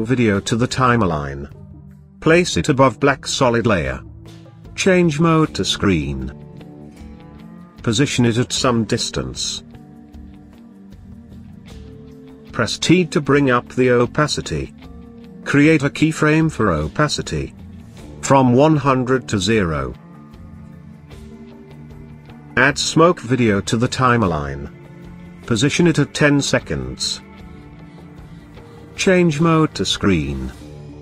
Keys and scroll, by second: 12.0 t.